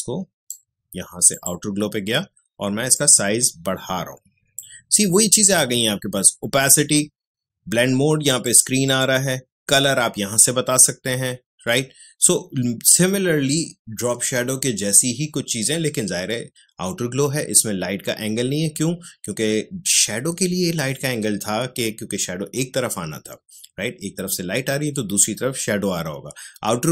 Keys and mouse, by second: 8.3 click.